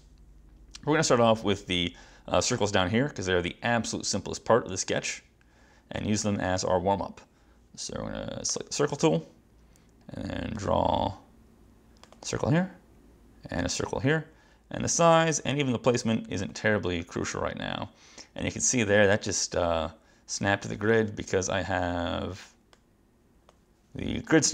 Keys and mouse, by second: 8.6 click, 10.6 click, 12.1 click, 13.7 click, 16.5 click, 22.8 click.